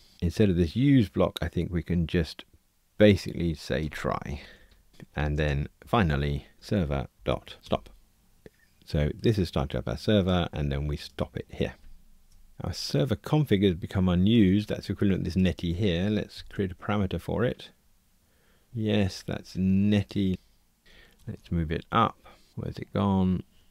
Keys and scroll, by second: 6.5 Tab, 7.1 Return, 16.3 alt+super+p, 20.8 alt+super+F6.